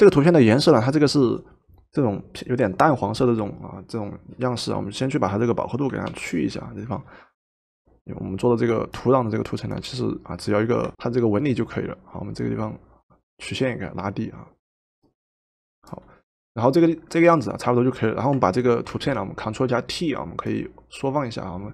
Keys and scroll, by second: 6.0 ctrl+u, 10.9 ctrl+m, 18.9 ctrl+t.